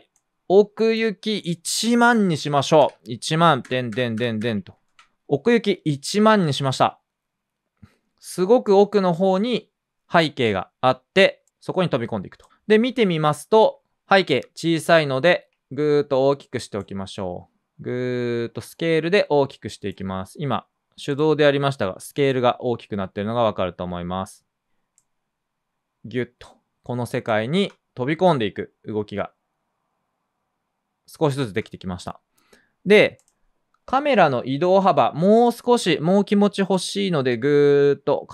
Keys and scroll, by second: 2.7-4.4 typing, 4.8 super+space, 5.1 Return, 21.4 s, 27.4 space, 31.4 space, 33.9 p.